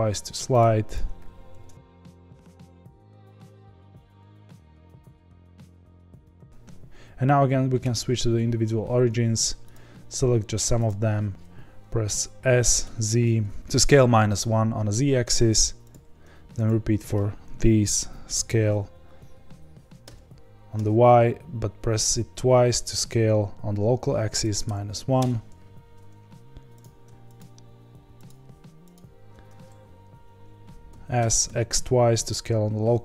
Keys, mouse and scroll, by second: 0.9 click, 1.5 ctrl+b, 2.3 KP_Divide, 2.6 middle click, 2.8 click, 2.9 middle click, 3.1 ctrl+b, 3.4 click, 3.5 ctrl+b, 3.8 middle click, 4.2 click, 4.2 middle click, 4.4 ctrl+b, 4.9 click, 5.1 g, 5.4 middle click, 5.5 scroll down 1, 5.7 click, 5.8 ctrl+b, 6.1 middle click, 6.5 ., 8.3 ., 9.7 click, 12.5 s, 15.9 click, 18.3 s, 26.2-26.8 scroll down 1, 26.8 click, 28.2 shift+click, 28.9 shift+click, 30.9 s.